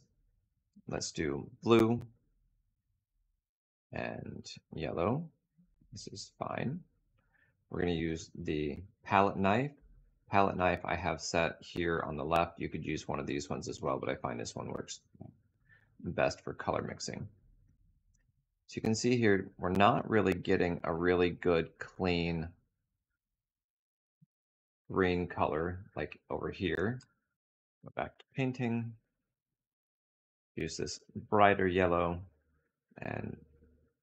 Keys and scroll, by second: 8.2 space, 14.6 space, 27.3 space, 33.3 space.